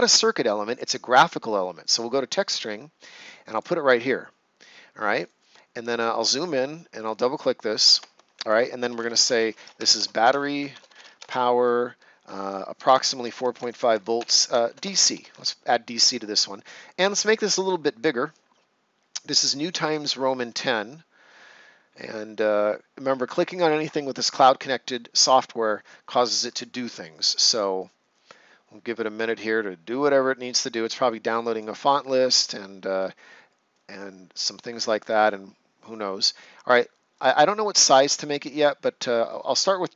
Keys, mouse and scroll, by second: 1.8 click, 5.1 right click, 5.9-6.2 ctrl+scroll up 1, 6.9 click, 8.6-11.5 typing, 12.8-15.1 typing, 19.4 click, 37.1 click.